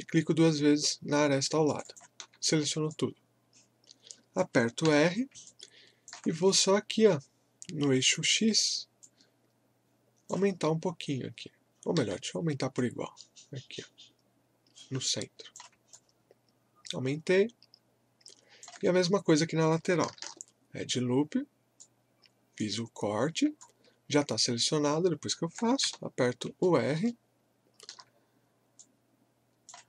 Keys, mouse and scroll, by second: 2.5 scroll down 1, 2.9 alt+click, 4.9 r, 5.5-8.4 alt+drag, 12.0 ctrl+z, 12.7-15.9 drag, 15.9-20.2 alt+drag, 20.2 ctrl+r, 21.8-23.6 drag, 23.6-25.8 alt+drag, 25.8 r, 26.6-28.8 alt+middle drag, 28.8-29.8 drag.